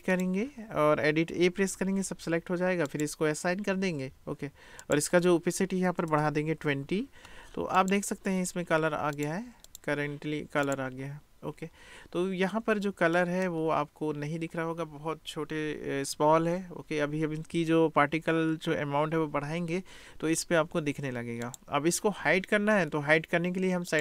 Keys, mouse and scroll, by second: 1.4 a, 2.9 click, 4.8-7.9 drag, 6.1 BackSpace, 9.1 click, 13.2 middle click, 21.4 click.